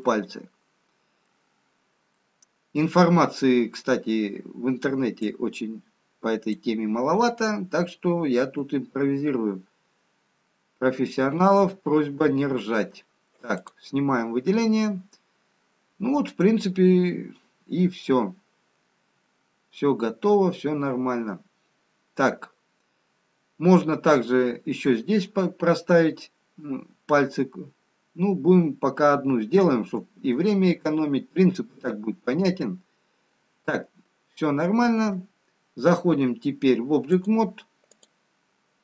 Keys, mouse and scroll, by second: 0.3 middle click, 1.7-3.0 scroll up 1, 3.0 middle click, 5.3 click, 9.7 g, 12.0 middle click, 14.7 click, 14.7-15.9 scroll down 2, 16.7-18.1 scroll up 2, 18.1-19.6 scroll down 1, 28.2-29.2 scroll up 1, 29.4 shift+middle click, 30.9 middle click, 34.6 middle click.